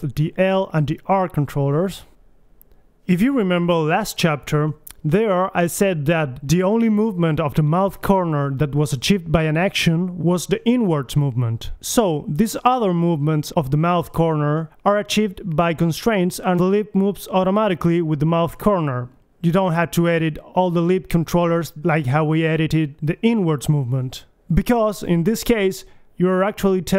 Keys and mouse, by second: 3.0 Right, 3.6 Left, 6.2 Right, 7.8 KP_1, 8.1 a, 11.3 middle click, 14.8 right click, 17.3-18.8 middle drag, 18.8 right click, 19.0 middle click, 19.2 middle click, 20.2 middle click, 21.5 right click, 22.2 g, 23.0 click, 23.9 click, 24.2 g, 24.8-26.4 drag, 26.4 KP_1.